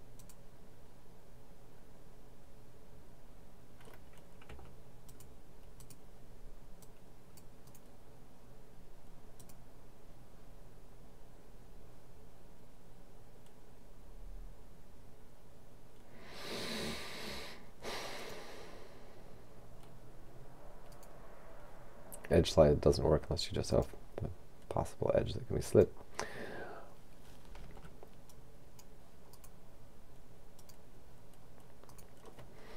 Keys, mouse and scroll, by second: 0.2 click, 4.5 c, 5.1 click, 7.7 right click, 9.4 click, 18.2 click, 21.0 right click, 23.8 click, 25.7 click, 27.6 c, 28.4-30.5 drag, 30.6 click, 31.9 right click, 32.6-32.7 scroll down 2.